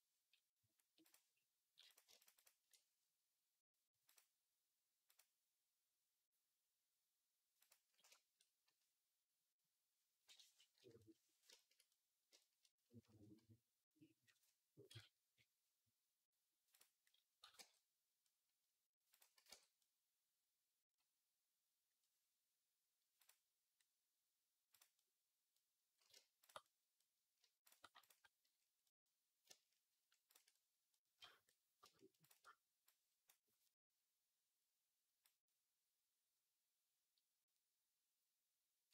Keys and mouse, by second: 2.1 alt+shift+click, 3.9-7.5 drag, 10.6 /, 14.7 KP_Decimal, 17.3 x, 19.2 x, 23.1-24.6 drag, 23.1-24.6 middle drag, 26.3 shift+click, 27.5 shift+click, 30.1 shift+click, 32.0 shift+click, 32.8-38.9 drag.